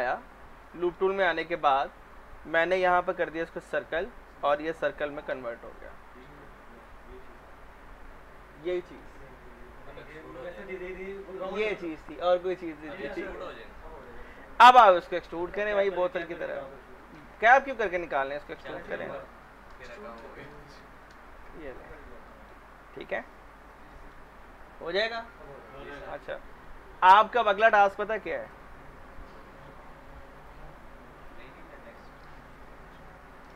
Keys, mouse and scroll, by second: 0.6-3.8 middle drag, 3.8 click, 4.3 middle click, 4.8 r, 5.5-10.6 drag, 13.5 scroll down 1, 14.1 alt+middle click, 14.7 w, 15.1 alt+middle click, 15.9 shift+click, 17.0 middle click, 17.9 shift+click, 18.6 middle click, 19.3 r, 20.0 shift+click, 20.5 middle click, 20.8 w, 21.4 shift+click, 22.3 middle click, 23.3 click, 23.9 middle click, 31.1 click, 33.2-33.5 typing.